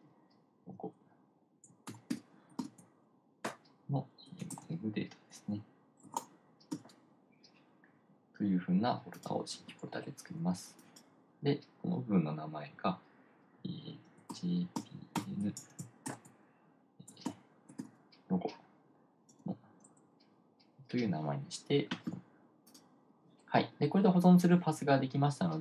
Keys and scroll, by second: 2.3-3.6 typing, 6.3-7.8 typing, 15.1-18.8 typing.